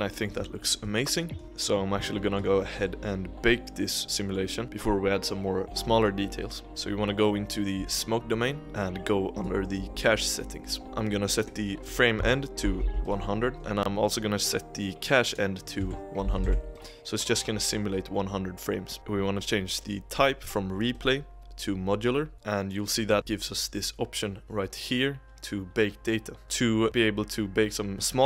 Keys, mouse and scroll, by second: 0.2-0.5 scroll up 2, 0.5-1.4 shift+middle drag, 1.4-2.1 scroll down 10, 2.1 shift+middle click, 2.4-2.8 scroll down 2, 2.8-4.6 middle drag, 4.6-6.6 scroll up 1, 6.7 click, 8.2-8.6 scroll down 5, 8.6-9.7 drag, 9.7-10.8 scroll down 1, 11.4-12.8 drag, 12.8 0, 13.5-15.1 drag, 16.4 0, 20.9-22.3 drag, 22.9-24.5 scroll up 12, 24.5-26.4 scroll up 4.